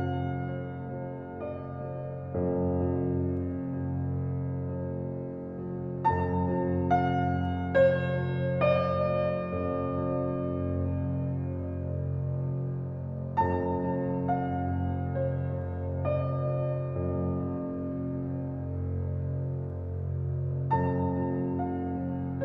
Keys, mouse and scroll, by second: 0.6-4.4 drag, 5.2-13.7 drag, 13.7 ctrl+alt+scroll down 1, 14.4 ctrl+alt+scroll down 1, 14.7 ctrl+alt+scroll up 1, 15.3 ctrl+alt+scroll up 1, 15.8 ctrl+alt+scroll up 1, 16.3 space, 16.4 click, 16.8 space, 17.3 alt+right click, 17.4-20.2 alt+right drag, 20.2 alt+click, 21.0 click.